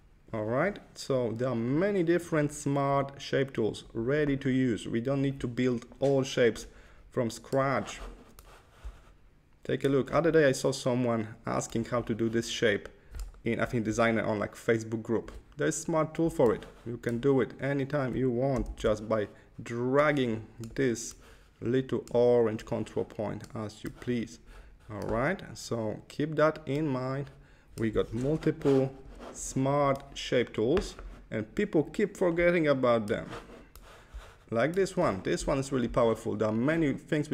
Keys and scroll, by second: 18.7 super+z, 28.1 Left, 28.9 Left.